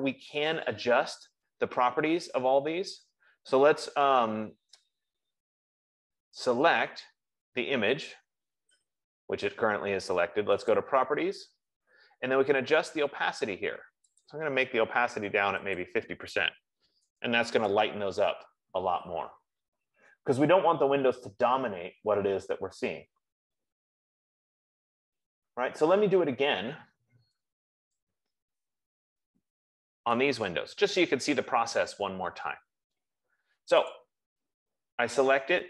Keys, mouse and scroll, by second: 6.1 click, 11.3 click, 14.7 click, 16.1 click, 18.1 click, 24.1 middle click, 24.6-25.2 scroll down 5, 25.6 scroll up 2, 29.2-30.6 scroll, 30.5 click, 34.3 click.